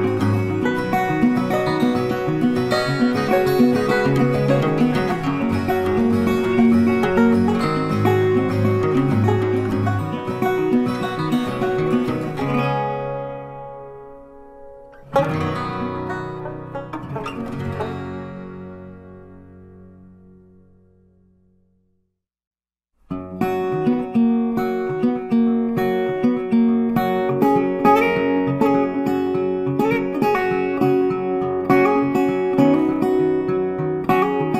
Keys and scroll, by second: 6.5 ctrl+t, 25.9 ctrl+t.